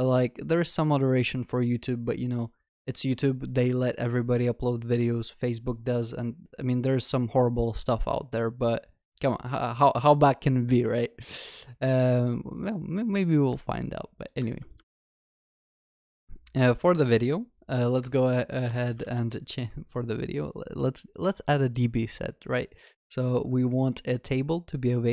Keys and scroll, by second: 14.9 ctrl+v.